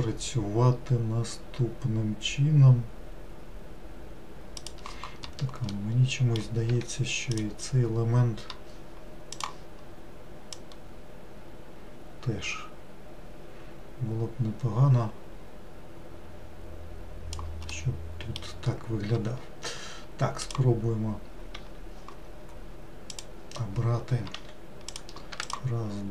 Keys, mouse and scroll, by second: 5.8-6.8 middle drag, 6.8 1, 7.3 click, 9.4-10.7 drag, 17.8-20.5 middle drag, 20.5 click, 23.1-24.4 drag, 24.4 3, 25.0 click, 25.5 shift+click.